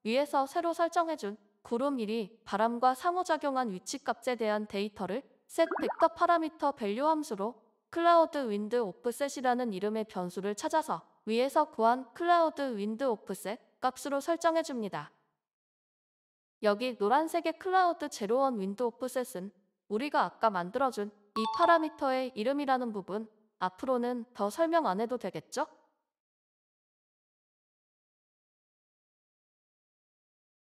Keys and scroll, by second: 1.9-5.9 typing, 16.5-17.2 typing, 29.5 ctrl+BackSpace.